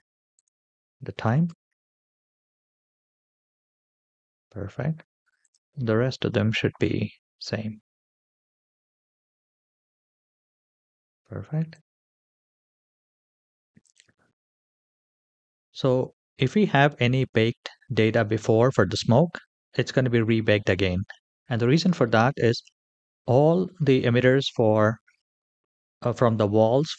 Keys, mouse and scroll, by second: 0.1-2.0 drag, 0.1-1.4 scroll down 1, 1.4 KP_0, 5.3 click, 6.2-8.2 scroll down 3, 8.2-9.7 scroll down 2, 10.3-11.6 scroll down 2, 11.6 drag, 13.7 click, 14.8-16.4 scroll down 3, 16.4 scroll down 1.